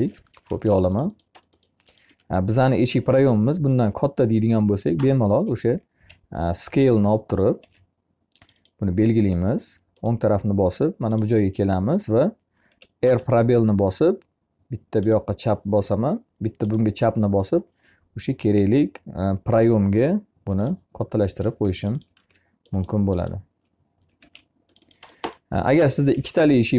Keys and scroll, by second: 1.9 Escape, 5.3 s, 12.1 r, 21.5 e, 24.0 m, 25.9 F8.